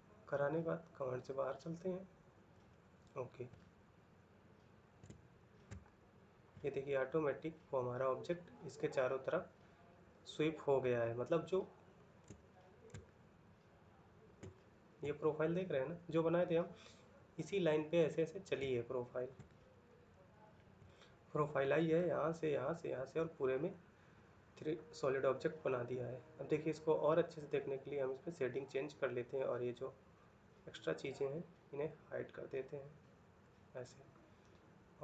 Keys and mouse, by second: 3.3 ctrl+middle click, 4.8 shift+middle click, 5.5 ctrl+middle click, 6.3 middle click, 12.1 shift+middle click, 12.7 ctrl+middle click, 14.2 shift+middle click, 18.4 shift+middle click, 19.8 ctrl+middle click.